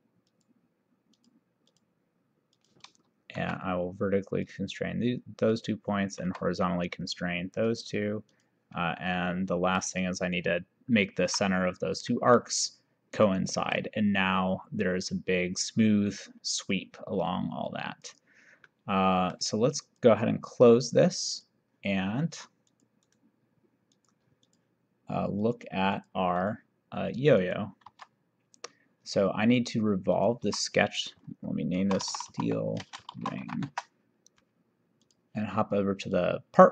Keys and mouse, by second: 0.4 click, 1.2 click, 3.6 v, 4.6 click, 5.6 click, 6.4 h, 7.7 click, 9.2 middle click, 10.1 click, 11.3 c, 12.2 middle click, 13.4 middle click, 18.0 click, 18.8 middle click, 20.0 click, 21.4 click, 22.7 click, 23.1 right click, 24.0 click, 27.9 2, 30.2 click, 30.5 F2, 31.8-33.6 typing, 33.8 Return, 33.8 KP_Enter, 35.0 click.